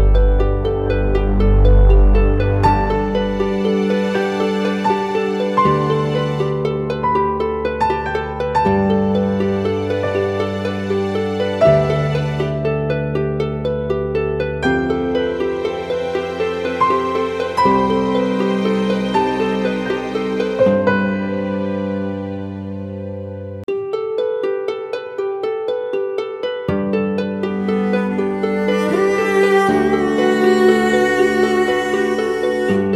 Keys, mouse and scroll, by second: 17.2 double click, 18.2 typing, 20.6 typing, 22.6 typing, 24.5 typing, 30.9 double click.